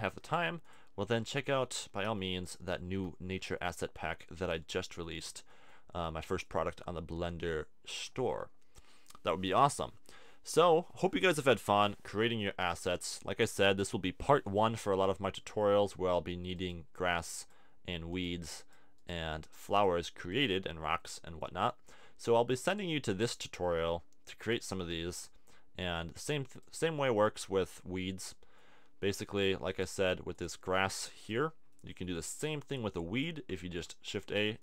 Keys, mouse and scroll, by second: 2.0 t, 11.0-12.9 middle drag, 12.9 click, 28.2 click, 29.7 click, 32.6 click, 33.6 shift+a.